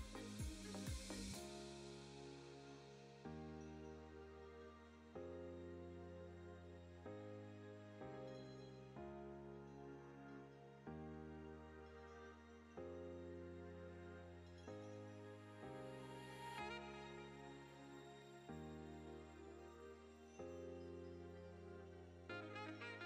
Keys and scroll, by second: 4.8 ctrl+z, 5.6 Tab, 6.3 Tab, 7.3 ctrl+z, 7.6 ctrl+z, 8.4 ctrl+z, 8.7 ctrl+z, 9.4 Tab, 13.4 Tab, 14.5 3, 16.8 i, 20.9 Tab.